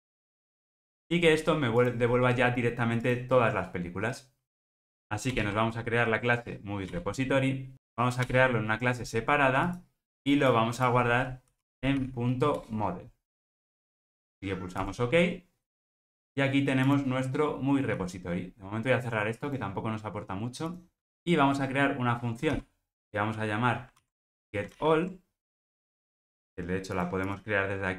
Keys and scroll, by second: 0.7 ctrl+alt+o, 5.4 alt+Return, 12.6 Return, 22.6 super+v, 24.6 super+z.